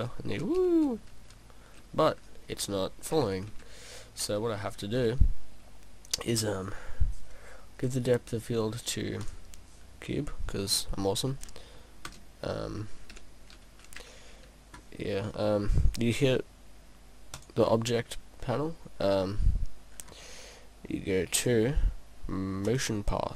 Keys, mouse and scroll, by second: 7.9 click, 10.7 middle click, 12.1 KP_0, 13.2 p, 17.4 click, 20.0-21.6 scroll down 1, 21.6 click, 21.6 scroll down 2, 22.7 click.